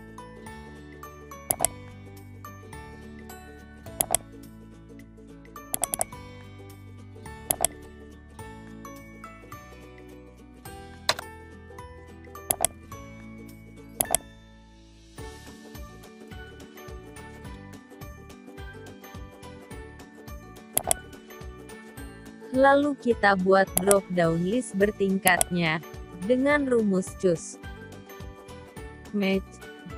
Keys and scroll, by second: 2.8 ctrl+v, 7.7 ctrl+x, 21.0 ctrl+v.